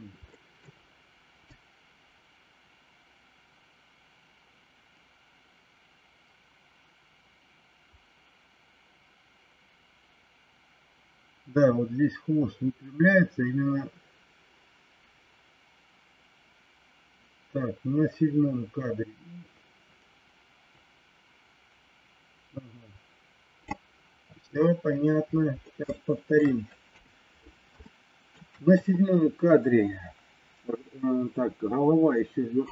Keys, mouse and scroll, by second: 0.3 middle click, 1.4-23.6 drag, 25.8 shift+middle click, 26.8 KP_3, 27.8 shift+middle click.